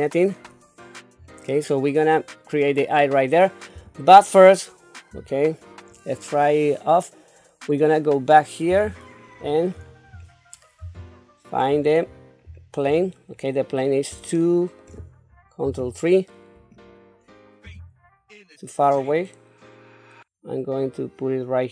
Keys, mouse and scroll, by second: 0.4-1.2 scroll up 2, 1.2-1.7 scroll down 2, 3.8 Tab, 5.1 q, 8.7 KP_3, 9.4-10.3 scroll down 5, 10.8 KP_Decimal, 11.7-12.9 scroll down 6, 13.3 scroll up 2, 14.4 shift+middle click, 15.6 ctrl+KP_3, 17.6 g.